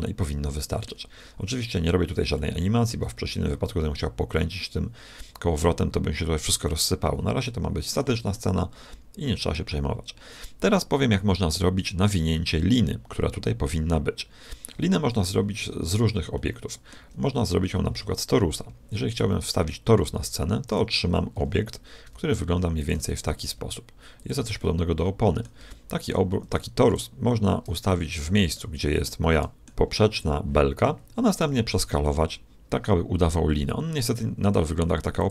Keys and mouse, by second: 1.1-4.0 middle drag, 7.4-10.2 middle drag, 15.2 KP_1, 16.3-18.1 middle drag, 19.1 shift+a, 21.3 g, 23.1 r, 24.5-25.5 middle drag, 26.8-28.5 drag, 28.5-30.7 middle drag, 31.4 s.